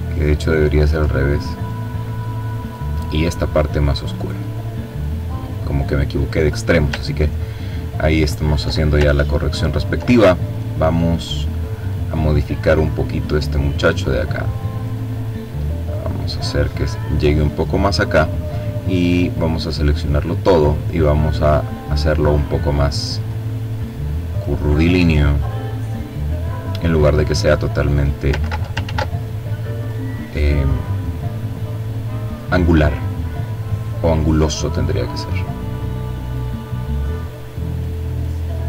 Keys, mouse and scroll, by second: 0.7 click, 2.2-5.0 drag, 5.2-5.8 ctrl+scroll down 2, 6.0-7.1 ctrl+drag, 7.4-8.0 scroll up 2, 9.3 click, 12.0-13.4 drag, 13.9-16.1 drag, 17.3-18.6 drag, 19.4 click, 21.3-22.9 drag, 23.1-24.7 drag, 25.3-26.6 drag, 26.8 ctrl+z, 27.8-30.9 drag, 31.3-32.9 drag, 33.4-34.8 drag, 35.2-36.8 drag, 37.2-38.6 drag.